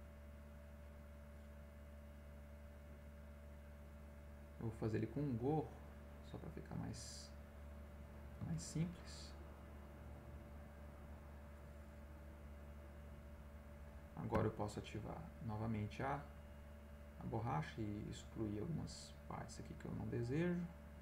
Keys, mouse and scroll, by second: 1.2 click, 2.2-4.1 drag, 4.8 click, 5.2 middle click, 5.9 click, 7.2-8.4 drag, 8.1 middle click, 8.6 ctrl+z, 9.5 click, 10.2-13.8 drag, 14.3 e, 14.9-18.6 drag, 19.5-20.9 drag.